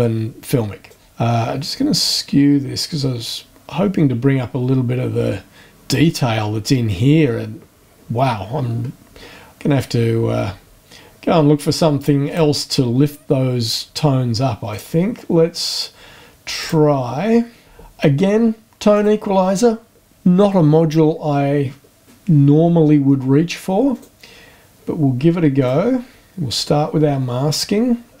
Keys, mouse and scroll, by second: 0.8-5.6 drag, 12.2 click, 14.7 click, 16.6 click, 18.9 click, 23.9 click, 25.6 click.